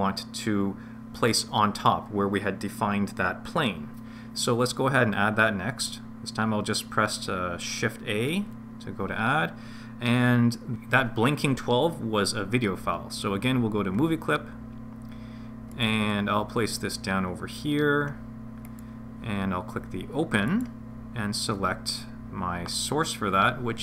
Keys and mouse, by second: 8.3 shift+a, 20.5-21.8 drag.